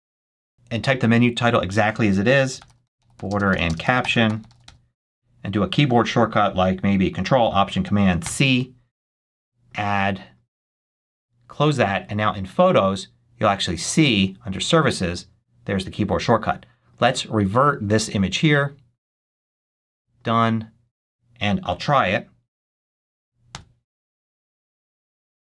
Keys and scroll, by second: 2.0-5.0 typing, 8.1 ctrl+alt+super+c, 23.4 ctrl+alt+super+c.